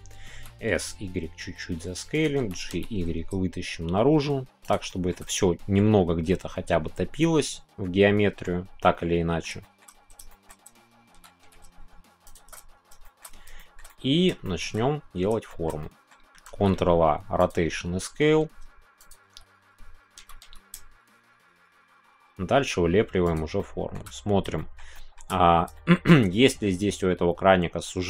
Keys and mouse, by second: 2.1 click, 3.3 shift+y, 4.6 click, 4.9 middle click, 5.3-8.4 middle drag, 7.3 click, 8.8 middle click, 9.6 shift+middle click, 10.3 shift+middle click, 11.6 shift+y, 12.2 click, 13.0 middle click, 13.6 middle click, 13.9 middle click, 14.4 shift+click, 15.4 shift+click, 15.6 shift+middle click, 16.4 ctrl+a, 18.1 Tab, 19.0 click, 20.2 g, 23.5 shift+middle click, 24.5 shift+middle click, 24.9 shift+middle click, 25.7 shift+middle click.